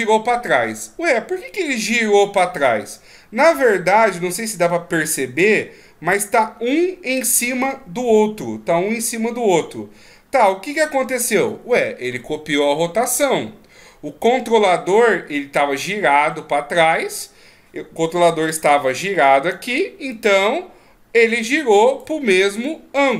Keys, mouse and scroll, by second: 3.4-4.7 scroll up 3, 6.1 ctrl+scroll up 1, 7.3-9.8 scroll up 2, 9.8 scroll down 2, 18.5 d, 18.7 click, 19.6-20.1 d, 20.1 click.